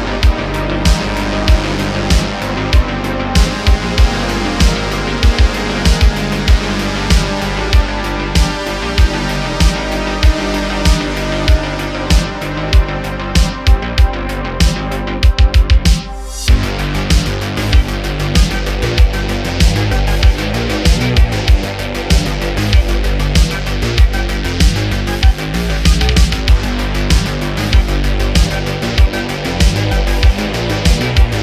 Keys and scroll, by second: 0.6 space, 2.4 space, 3.9 space, 5.2 space, 10.6 super+z, 11.2 Tab, 12.1 1, 25.0 Tab, 26.6 space, 29.0 space, 29.5 space, 29.6 shift+Left, 29.9 Right.